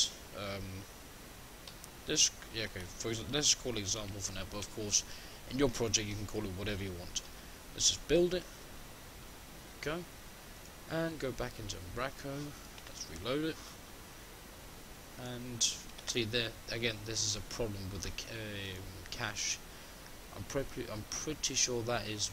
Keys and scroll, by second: 12.3 shift+F10, 21.5 shift+F10.